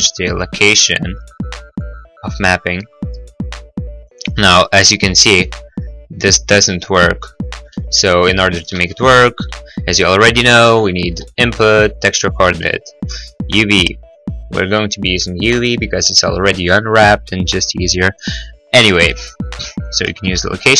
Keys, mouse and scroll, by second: 0.8 click, 2.0 click, 2.7 middle click, 3.5 middle click, 5.5 scroll, 7.5 middle click, 7.7 middle click, 8.5-11.3 typing, 8.7 middle click, 12.3 click, 13.0 click, 14.3 click, 15.3 click, 15.5 click, 15.8 click, 16.9 middle click, 17.2 middle click, 18.3 scroll, 18.8-19.3 scroll, 19.8 click, 20.3 0, 20.3 ., 20.6 Return, 20.6 5.